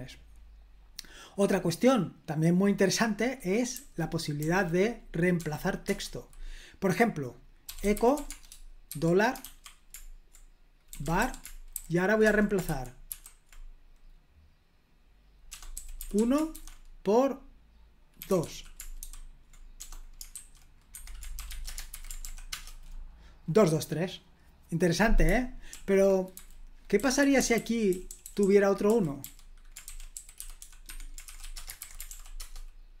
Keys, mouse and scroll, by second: 0.0-1.3 scroll down 1, 1.3-2.2 scroll down 1, 2.3 click, 3.7-5.3 typing, 5.8 Return, 7.4-9.4 typing, 10.6-13.0 typing, 15.4-21.8 typing, 20.9 Escape, 21.8 super+h, 22.2 ctrl+p, 22.4 Return, 25.6 super+l, 26.3-31.7 typing, 31.8 super+h, 32.0 ctrl+p, 32.3 Return.